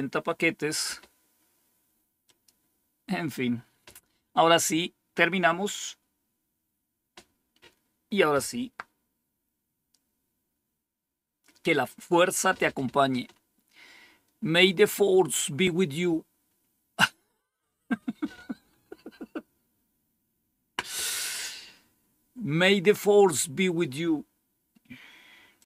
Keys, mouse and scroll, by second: 2.2-3.2 drag, 25.5 click.